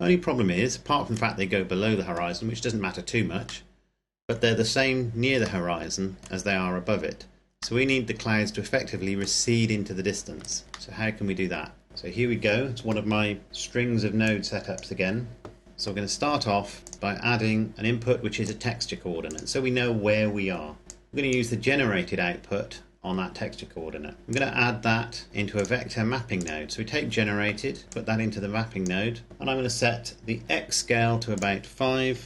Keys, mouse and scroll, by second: 2.7-3.6 scroll down 1, 3.6 middle click, 5.8 middle click, 6.8-7.7 scroll down 1, 7.7 middle click, 10.3 click, 10.6 scroll down 1, 10.8 middle click, 13.5 click, 18.4 click, 22.3-24.1 scroll up 1, 24.2 click, 25.5 click, 28.1 click, 31.2 click.